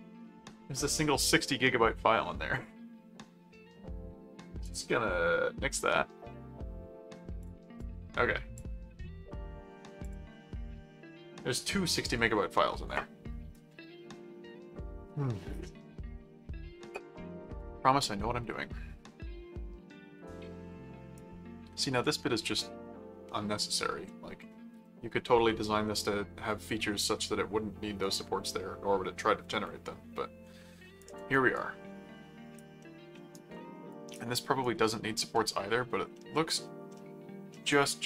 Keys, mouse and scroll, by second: 4.6 click, 7.4 click, 10.0 click, 18.0-21.1 right drag, 28.0-31.0 right drag, 31.5 right click, 32.8 middle click, 33.3 right click, 34.6 right click, 35.3 middle click, 36.1 middle click, 36.9 middle click, 37.7-38.0 right drag.